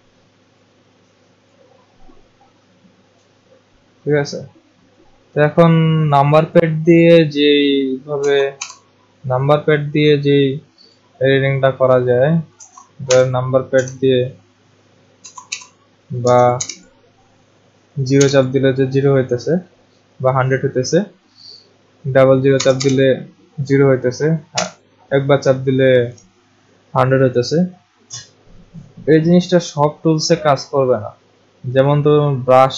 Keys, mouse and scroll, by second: 0.6 click, 1.5 click, 8.2 1, 8.6 1, 10.9 click, 12.6-13.8 typing, 15.2-16.2 typing, 17.9-18.6 typing, 22.5 0, 22.8 0, 24.5 0, 32.2 click.